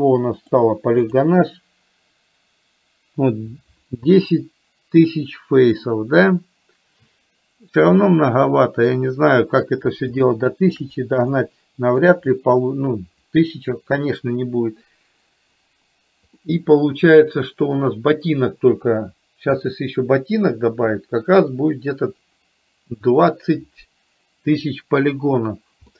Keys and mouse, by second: 10.4 shift+middle click, 11.4 middle click, 16.4-19.7 middle drag.